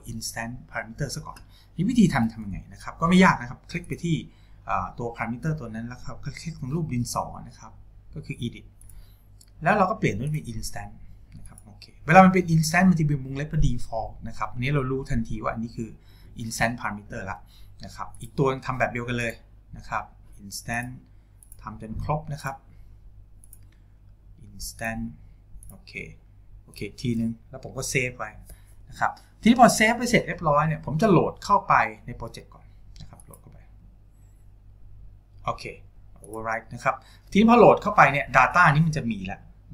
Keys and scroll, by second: 28.8 ctrl+s.